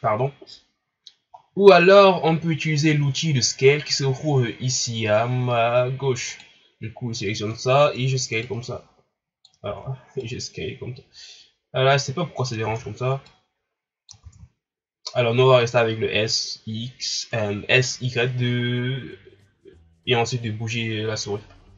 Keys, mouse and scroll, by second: 1.4 ctrl+scroll down 3, 6.3-9.7 drag, 9.7 ctrl+z, 10.2-12.7 drag, 12.7 ctrl+z, 13.3 click, 14.2 ctrl+z.